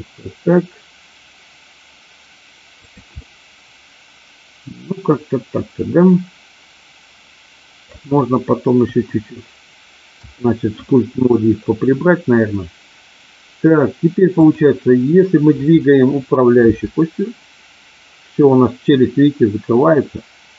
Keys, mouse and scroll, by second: 3.1-8.0 middle drag, 8.7 KP_1, 10.2 KP_3, 16.7 r.